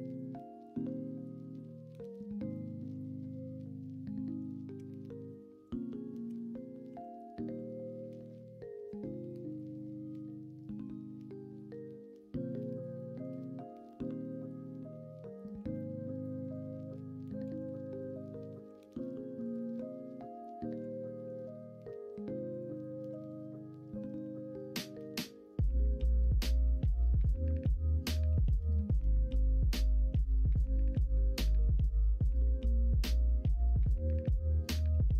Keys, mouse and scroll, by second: 0.6 KP_1, 1.5 KP_3, 4.7 g, 6.2 o, 6.8 r, 15.5 s, 17.4 s, 18.6 s, 19.7 middle click, 20.7 s, 23.0 KP_1, 23.2 KP_3, 26.1-33.4 drag.